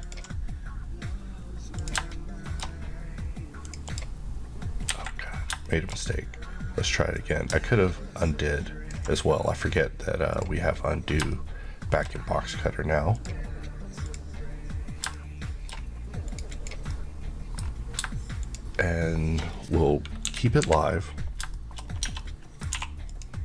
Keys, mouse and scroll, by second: 0.1 ctrl+click, 2.1 shift+middle click, 3.7 click, 4.9 click, 5.3 scroll down 1, 5.7 shift+middle click, 6.0-7.2 shift+scroll up 1, 7.2 click, 13.2 click, 14.1 shift+click, 15.2 shift+middle click, 16.3 click, 16.9 middle click, 18.5 shift+click, 19.5-20.3 scroll down 1, 20.3 KP_1, 20.7 KP_3, 21.5 shift+KP_3, 21.6 shift+middle click, 21.9 shift+scroll up 2, 22.1 Tab, 22.3 middle click, 22.8 2, 23.2 click.